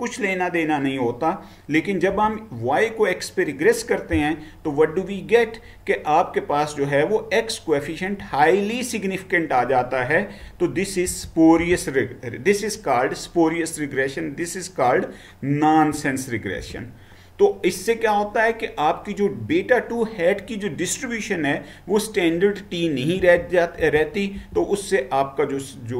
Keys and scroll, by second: 2.1 Right, 11.1 Down, 16.7 Down, 16.7 Right, 23.2 Down, 23.9 Down, 24.4 Down.